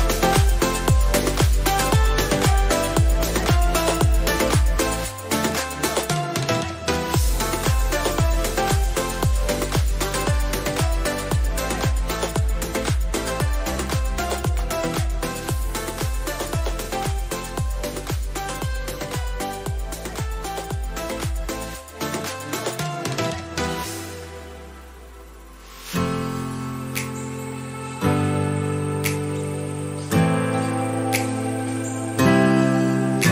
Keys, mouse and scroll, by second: 4.9 ctrl+t, 5.5-8.9 drag, 11.0 Right, 11.6 Right, 13.5 click, 15.5-16.9 scroll up 1, 17.1 click, 17.6 Left, 18.1 Down, 19.2 Left, 19.9 Down, 20.8 Right, 23.0 click, 25.2 ctrl+click, 28.3 ctrl+click, 28.6 shift+F6, 30.6 click, 32.5 shift+F5.